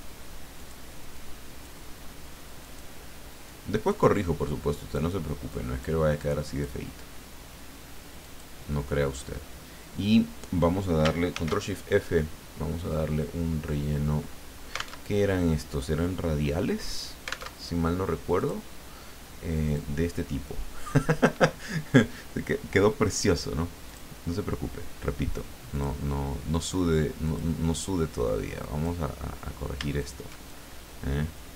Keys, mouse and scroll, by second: 0.6 click, 1.3 click, 2.6 click, 3.4 click, 4.5 click, 5.5 click, 6.2 click, 8.2 click, 11.3 ctrl+shift+f, 17.5 alt+Tab, 18.4 click, 19.6 click, 23.9 click, 25.7 click, 27.2 click, 28.6 click, 30.0 shift+click, 30.4-31.5 shift+drag.